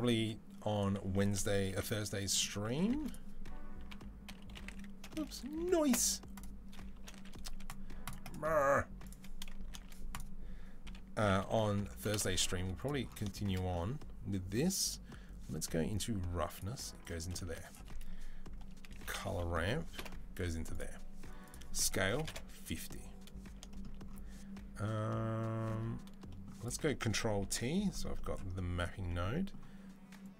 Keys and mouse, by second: 27.9-30.3 right drag.